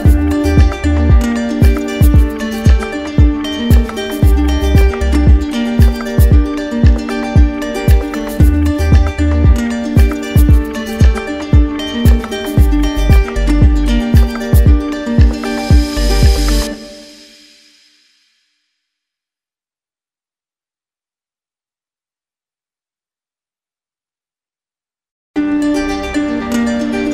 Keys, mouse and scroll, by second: 0.1 click, 1.9 click, 2.3 alt+click, 3.0 alt+click, 3.6 click, 6.1 click, 7.5 click, 12.7 click, 13.5 alt+click, 14.6 click, 19.1 click, 21.4 ctrl+d.